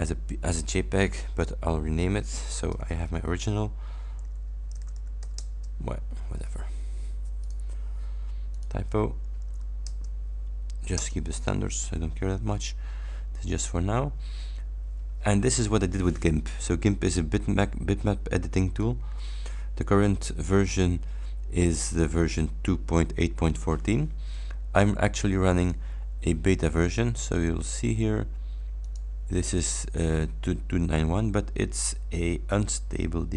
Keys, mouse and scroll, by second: 1.5 Right, 2.7 ß, 4.1 f, 4.8 BackSpace, 5.3 c, 6.0 Return, 7.5 click, 8.6 click, 9.3 Left, 9.5 BackSpace, 9.9 Return, 11.0 Return, 25.6 click, 26.9 click, 28.9 click.